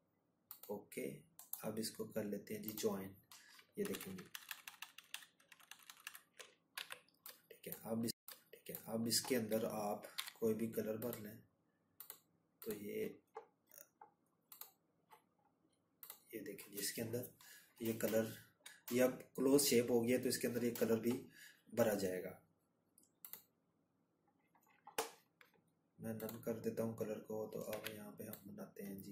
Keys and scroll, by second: 0.3 ctrl+-, 0.5 ctrl+-, 3.3 z, 23.2 z.